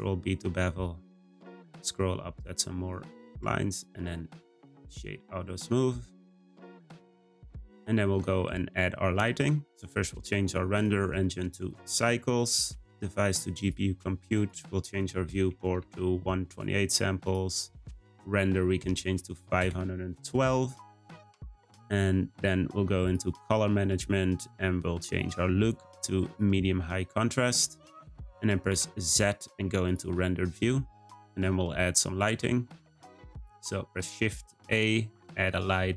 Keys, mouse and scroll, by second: 3.3 Tab, 3.7-5.4 right drag, 5.4 `, 6.7-7.9 scroll down 2, 7.9-8.4 scroll up 2, 9.6 click, 10.7-17.3 drag, 17.7-20.8 drag, 23.0-23.5 drag, 23.5-25.1 scroll down 6, 25.1-27.5 drag, 28.7 z, 32.0 scroll up 1, 33.2 shift+a.